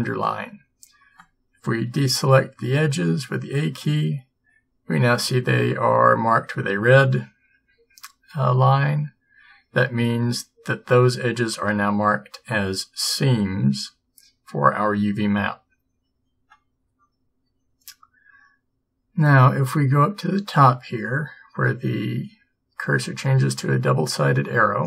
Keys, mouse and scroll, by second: 3.1 a.